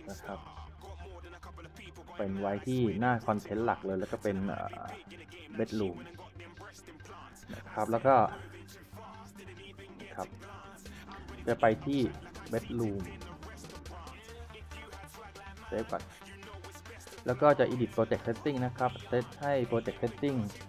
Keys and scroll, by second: 4.9-5.8 typing, 6.6 Return, 10.2-11.5 typing, 16.7-17.5 typing.